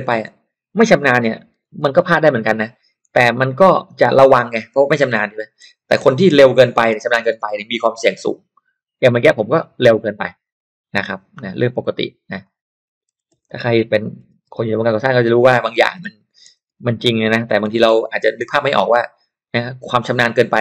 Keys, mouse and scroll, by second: 1.5-4.1 typing, 4.8 click, 5.3 click, 5.8-7.8 typing, 9.0 click, 10.4 click, 12.4 click, 12.9-14.9 typing, 15.6 click, 16.4-18.0 typing.